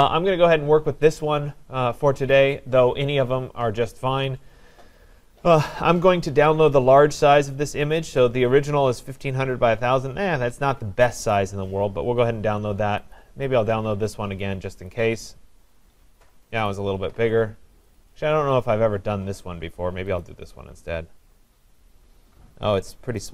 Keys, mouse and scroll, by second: 4.8 click, 6.5 click, 11.3 click, 13.2 click, 14.9 click, 17.9 click, 18.2 click, 20.2 click.